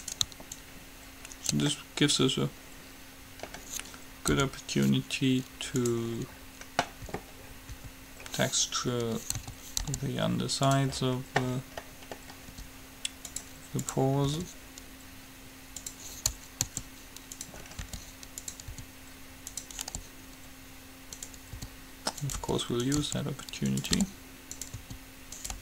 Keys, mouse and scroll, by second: 0.3-2.2 right drag, 0.7-2.6 drag, 0.7 middle click, 2.0-4.6 middle drag, 4.6 u, 6.6-10.4 middle drag, 7.3 a, 8.1 a, 9.6 a, 10.1 g, 12.7 r, 14.0-15.8 drag, 14.6 r, 16.8 s, 17.8-19.7 middle drag, 18.1 g, 18.9 s, 20.1 g, 21.7-25.6 typing.